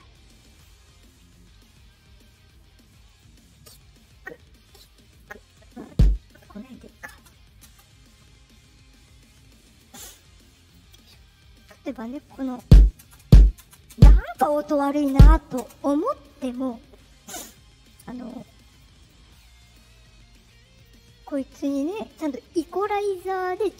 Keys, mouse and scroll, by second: 3.0 click, 5.0 click, 5.8 click, 7.1 space, 7.6 space, 9.3 click, 10.6 click, 11.1 scroll, 12.3 click, 12.5-15.5 typing, 17.2 click, 18.3 click, 18.7 click, 18.9 click, 19.6 click, 20.7 click, 21.7 click.